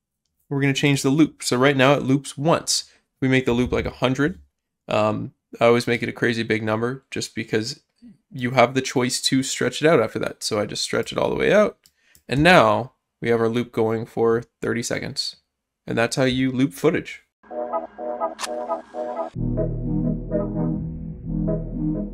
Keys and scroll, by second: 3.6 0, 12.3 0, 12.3 space.